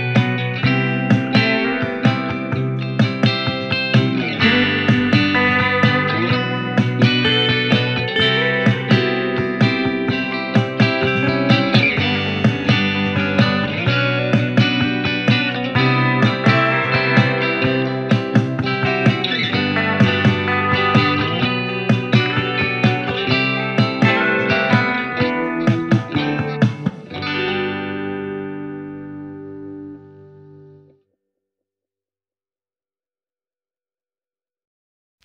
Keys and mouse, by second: 5.7 middle click, 6.5 click, 6.9-9.4 middle drag, 9.4 click, 9.5-10.4 middle drag, 10.4-35.2 drag, 21.9 w, 25.7 typing, 26.9 ctrl+z, 34.5 w.